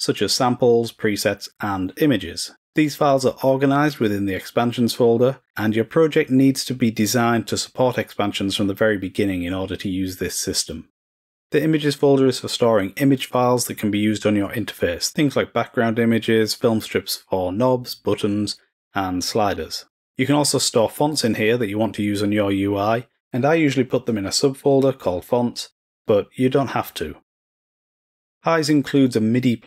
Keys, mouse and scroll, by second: 11.3 click, 24.1 click, 28.6 click.